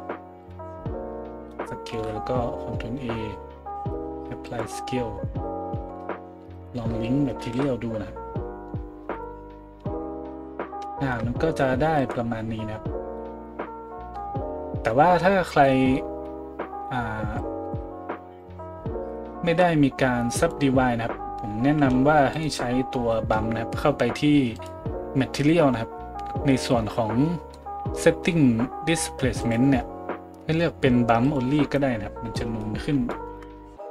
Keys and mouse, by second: 1.9 ctrl+a, 3.7 ctrl+a, 6.5 right click, 6.6-12.0 shift+middle drag, 7.4 ctrl+l, 9.8 a, 12.0 right click, 12.1-17.4 middle drag, 17.4-24.6 drag, 21.8 a, 22.3 middle click, 22.3 right click, 24.6-29.4 middle drag, 29.4-33.9 drag, 33.7 a.